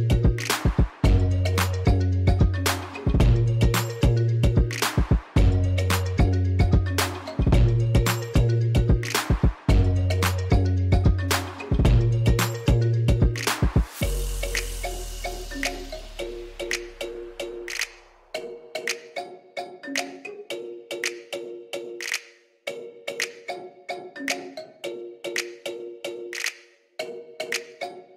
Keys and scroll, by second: 0.3 s, 2.8 shift+z, 5.1 shift+z, 6.5 shift+z, 6.9 e, 7.0 z, 8.2 ctrl+3, 8.7 i, 14.7 x, 15.5 x, 16.4 x, 18.4 1, 19.0 x, 20.6 3, 24.3-25.1 typing, 25.4 Return.